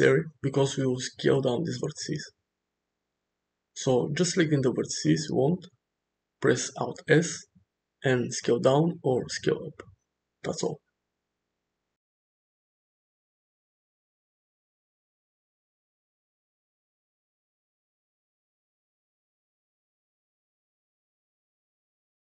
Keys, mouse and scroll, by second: 0.2 middle click, 0.4 Tab, 1.0 click, 1.9 shift+click, 3.3 ctrl+s, 7.5 alt+s, 8.9 alt+s, 10.3 alt+s, 13.4-14.5 middle drag, 14.8 shift+middle click, 15.4 click, 15.8 alt+s, 16.2 click, 16.3 alt+s, 16.7 click, 17.1 alt+s, 17.6 click, 17.6-20.7 typing, 17.8 click, 18.2 click, 18.5 click, 18.8 shift+middle click, 19.0 click, 19.4 click, 19.9 shift+middle click, 20.0 click, 20.2 click, 21.0 click, 21.3 alt+s.